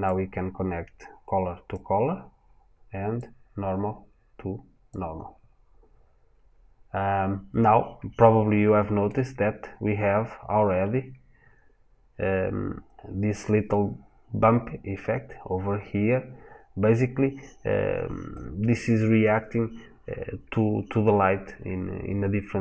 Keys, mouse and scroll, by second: 5.8 scroll up 1, 7.2 scroll down 1, 8.0 shift+middle click, 18.2 middle click.